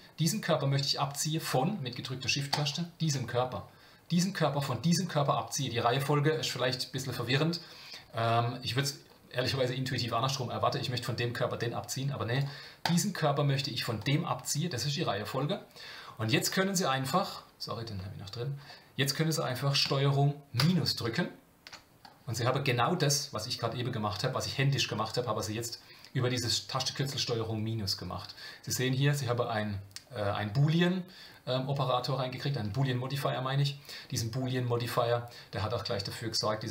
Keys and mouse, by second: 2.5 shift+click, 12.8 click, 14.0 shift+click, 17.2 click, 20.6 ctrl+KP_Subtract.